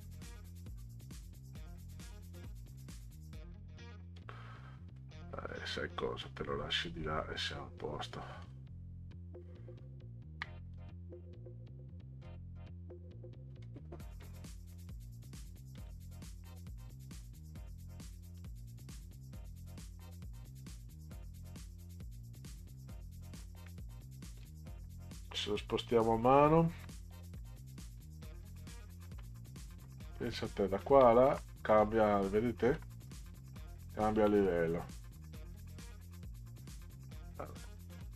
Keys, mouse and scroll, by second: 4.1-5.0 drag, 6.2-7.2 drag, 8.4 click, 9.8 ctrl+scroll down 2, 10.7 click, 12.2 click, 13.6 click, 14.2 click, 14.7 click, 15.7 click, 18.4 click, 19.6-21.3 drag, 23.7 middle drag, 26.7 Left, 27.1 Left, 27.5 Left, 27.6 Left, 27.9 Left, 29.0 Right, 29.7 Left, 30.2 Right, 30.9 Left, 31.3 Right, 32.7 Left, 33.1 Right, 33.4 Left, 33.8 Right, 34.2 Left, 35.6 middle click.